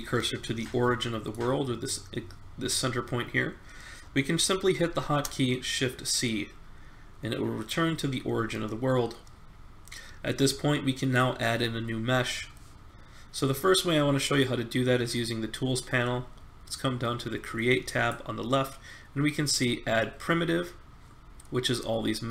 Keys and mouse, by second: 4.8 shift+c, 6.3-7.6 middle drag, 17.8-19.8 drag.